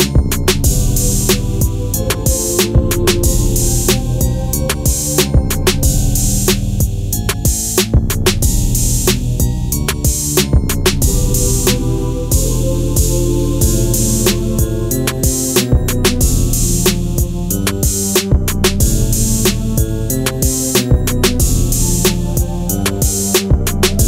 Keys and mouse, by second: 3.7-4.2 middle drag, 4.9 Tab, 5.4 middle click, 6.6 ctrl+r, 8.4 click, 9.0 ctrl+r, 10.4 click, 10.8 ctrl+r, 12.1 click, 12.8 ctrl+r, 13.8 click, 14.3 ctrl+r, 14.5 click, 15.1 click, 16.3 middle click, 17.6 ctrl+r, 19.3 click, 20.9 ctrl+z, 22.0 ctrl+r, 23.9 ctrl+b.